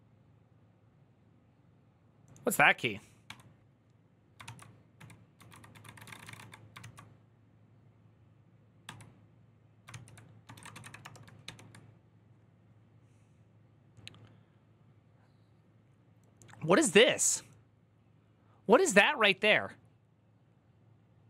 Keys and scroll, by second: 4.2 ctrl+c, 4.2-7.1 typing, 8.6-11.2 typing.